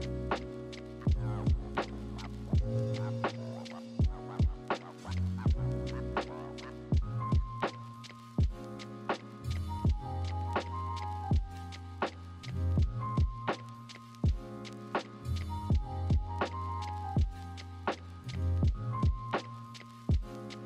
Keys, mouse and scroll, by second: 0.1 ctrl+-, 2.4 ctrl+=, 3.5 ctrl+z, 4.5 ctrl+z, 5.0 ctrl+=, 5.5 ctrl+=, 5.9 ctrl+-, 12.0 ctrl+z, 12.8 ctrl+z, 13.7 ctrl+z, 14.4 ctrl+z, 16.3 ctrl+=, 16.5 ctrl+-, 20.5 ctrl+z.